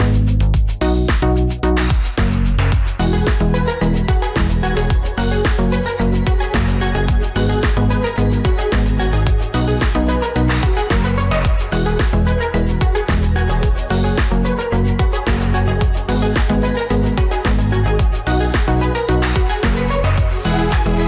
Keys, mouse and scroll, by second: 2.3 Right, 2.6 ctrl+t.